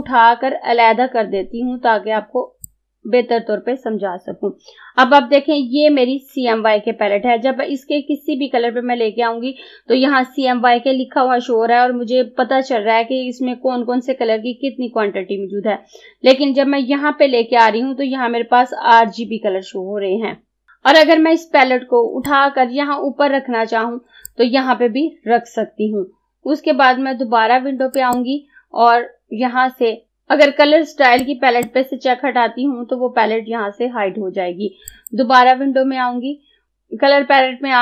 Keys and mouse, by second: 0.0-22.3 drag, 22.3-28.0 drag, 31.3-34.3 drag, 34.9 click.